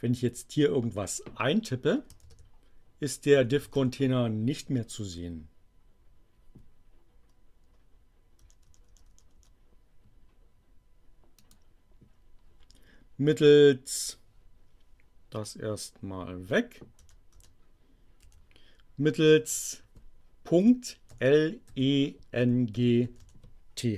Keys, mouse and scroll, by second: 2.2-4.2 typing, 8.4 BackSpace, 11.3 click, 15.4-16.5 drag, 16.9 BackSpace, 18.2 Delete, 19.4 click, 20.5-23.6 typing.